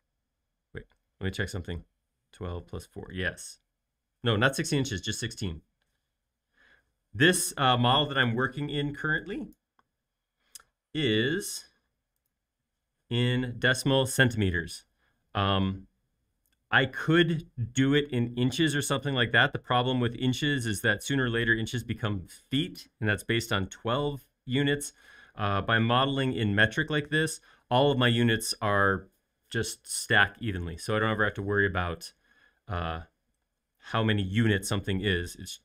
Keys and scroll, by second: 3.4 Return, 4.7-5.6 typing, 33.5 space.